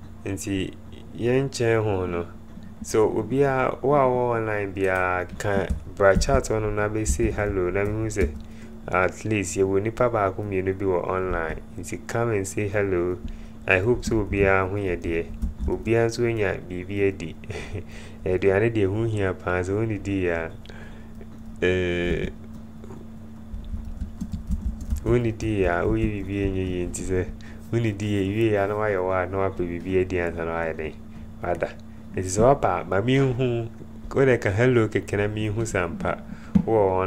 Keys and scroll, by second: 6.2-8.3 typing, 11.5 Return, 15.3-16.0 typing, 19.1-19.8 typing, 22.3 a, 23.5-26.4 typing.